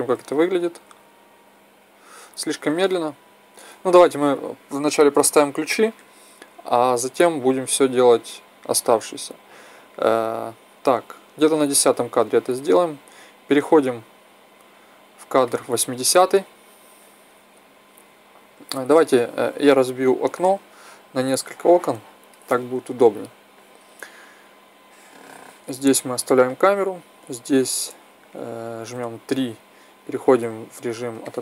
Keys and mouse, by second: 0.7 alt+a, 2.4 Escape, 8.0-9.8 drag, 19.9 t, 21.3-23.1 drag, 24.6-26.6 drag, 28.7 KP_3, 31.2-31.4 middle drag.